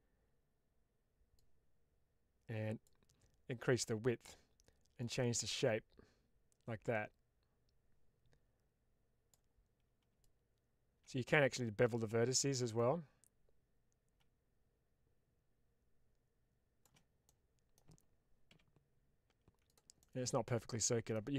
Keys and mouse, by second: 1.3-2.7 drag, 5.1-9.2 drag, 10.1-11.8 shift+drag, 12.6-16.7 drag, 17.2 middle click, 18.4 s, 19.6 click, 20.0-21.0 middle drag.